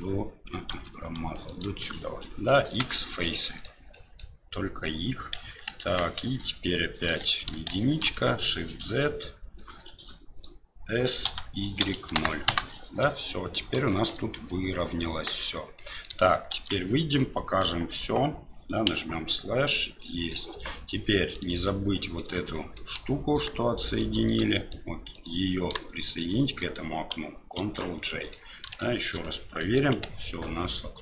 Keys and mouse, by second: 0.7 ctrl+z, 1.4 ctrl+right click, 2.7 x, 3.9 middle click, 5.3 KP_1, 5.8 KP_3, 7.1 1, 7.7 shift+z, 8.1 shift+middle click, 9.7 click, 11.2 s, 13.9 shift+middle click, 15.4 Tab, 15.8 middle drag, 16.6 shift+z, 17.2-17.6 middle drag, 18.9 KP_Divide, 20.0-20.3 middle drag, 21.3 right click, 21.6-22.2 middle drag, 22.4-22.8 shift+middle drag, 23.8 shift+right click, 24.5 right click, 25.1 right click, 26.1 shift+right click, 27.6 ctrl+j, 28.0 middle drag, 28.8-29.1 shift+middle drag, 29.2-29.6 middle drag, 29.9 g.